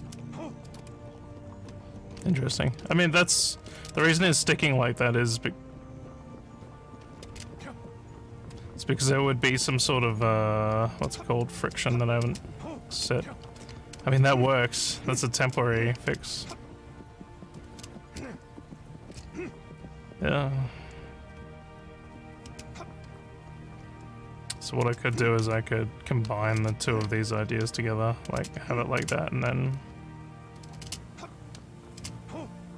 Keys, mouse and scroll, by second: 0.0-0.1 typing, 1.4-3.6 typing, 7.1 a, 9.0-11.6 typing, 12.9-21.9 typing, 23.8 d, 24.2 a, 25.4-32.6 typing.